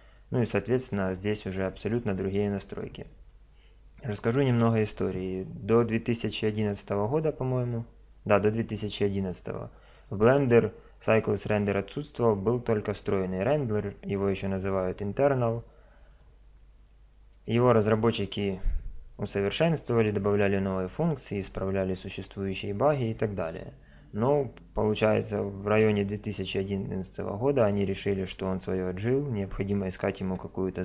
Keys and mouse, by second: 9.9 click.